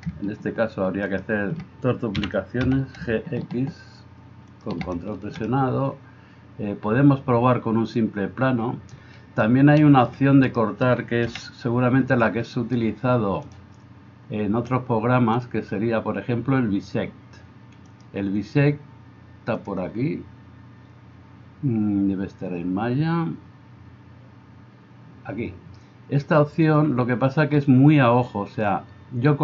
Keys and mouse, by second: 2.1 g, 10.5 right click, 11.3-13.5 middle drag, 11.3 KP_1, 13.5-29.4 drag.